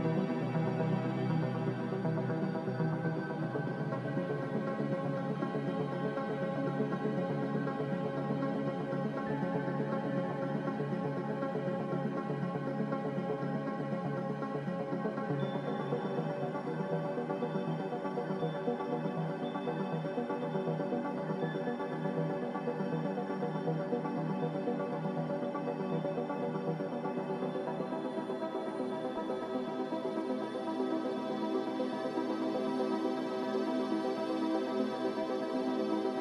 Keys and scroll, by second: 6.3 Return, 12.4 Delete, 14.0 ctrl+c, 23.3 typing, 24.0 Return, 30.6 m.